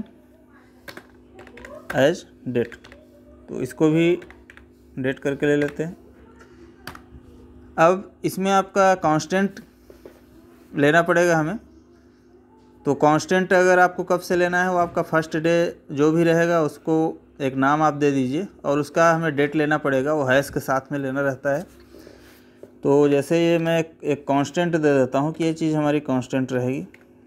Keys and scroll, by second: 0.7 space, 1.7 space, 5.4 Tab.